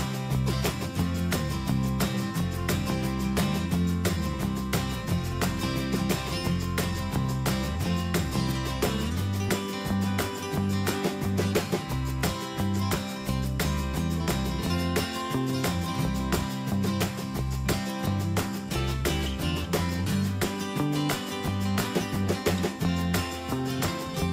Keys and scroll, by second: 3.1 ctrl+Return, 3.9 shift+Down, 4.5 shift+Up, 5.8 ctrl+a, 9.5 ctrl+Return, 20.9 ctrl+t.